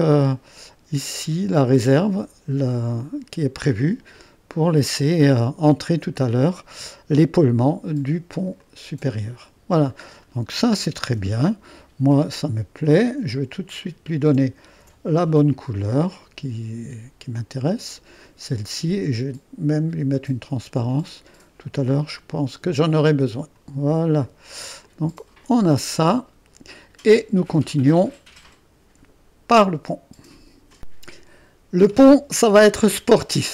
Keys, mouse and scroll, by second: 4.2-6.6 drag, 8.6 click, 9.9 click, 10.1-10.8 scroll down 1, 11.2 0, 13.8 click, 13.9-14.6 typing, 14.7 ctrl+d, 16.1 click, 17.8-18.8 drag, 19.7-25.6 drag, 25.6-27.4 middle drag, 28.7 middle click, 30.8-33.5 drag.